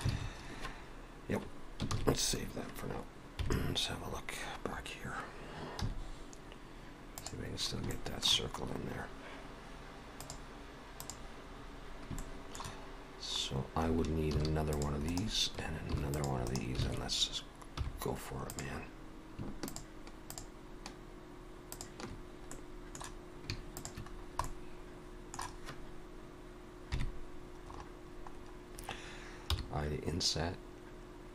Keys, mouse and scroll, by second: 0.1 alt+a, 2.0 ctrl+s, 3.4 KP_3, 5.8 z, 7.6 scroll up 3, 7.9 shift+middle click, 8.6 scroll up 2, 10.1 click, 11.6-12.1 scroll up 2, 12.2 shift+middle click, 12.9 scroll down 1, 13.4-14.1 scroll up 1, 14.3 ctrl+r, 15.9 ctrl+r, 16.9 alt+a, 17.8 3, 18.5 click, 19.7 shift+click, 22.5 middle click, 23.8 shift+click, 24.1-25.0 scroll down 3, 24.4 middle click, 26.9 KP_3, 27.7-28.2 scroll up 3, 28.4 scroll up 2, 29.5 i.